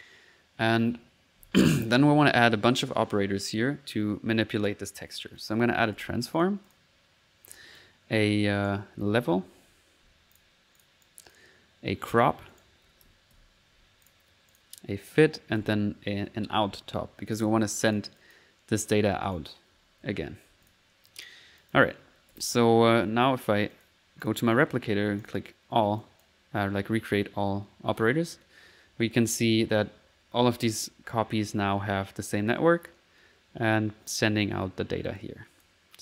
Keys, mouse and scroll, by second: 5.4 right click, 5.5-6.5 typing, 6.4 click, 7.5 click, 8.6 right click, 9.2-9.9 typing, 10.8 click, 12.5 right click, 12.6-13.8 typing, 14.1 click, 14.5 click, 15.1 right click, 15.4-16.3 typing, 17.3 click, 17.9 click, 19.3 right click, 19.5-20.3 typing, 20.7 click, 21.1-22.2 drag, 22.3 ctrl+s, 22.4-23.7 ctrl+middle drag, 23.2 ctrl+s, 23.7-24.9 ctrl+drag, 25.2 click, 26.0 click, 26.6 click, 28.4-29.6 middle drag, 35.2 click.